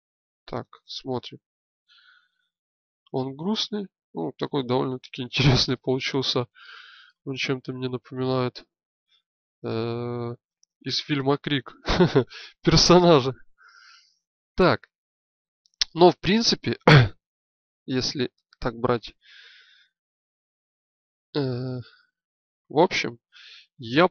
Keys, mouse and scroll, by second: 4.1 middle click, 15.5 shift+space, 17.0 KP_1, 22.1-23.3 drag.